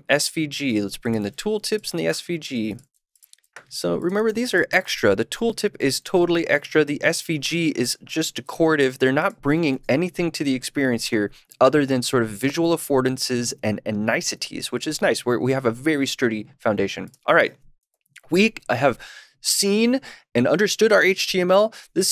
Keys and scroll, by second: 5.3 super+/, 9.6 super+s.